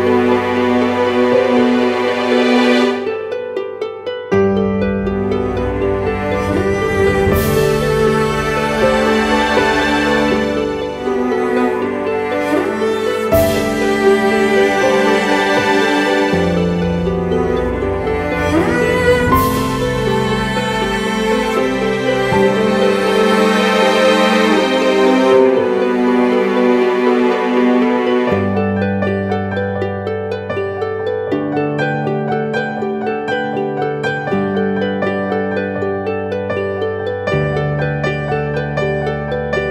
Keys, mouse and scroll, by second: 12.4 alt+click, 21.5-22.8 typing.